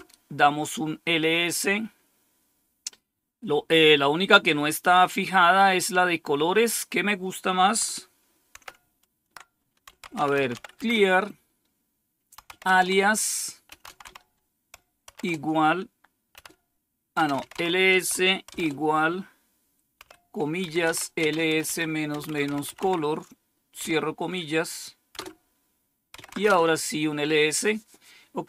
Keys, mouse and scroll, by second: 8.4 ctrl++, 9.6-11.0 typing, 12.0-15.0 typing, 16.2-18.4 typing, 19.9-23.7 typing, 25.0 Return, 25.8-26.9 typing.